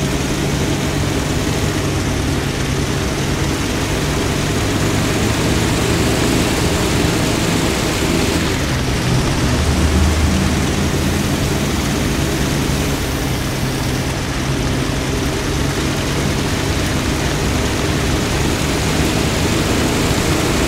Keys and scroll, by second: 8.0-8.8 typing, 12.3 a.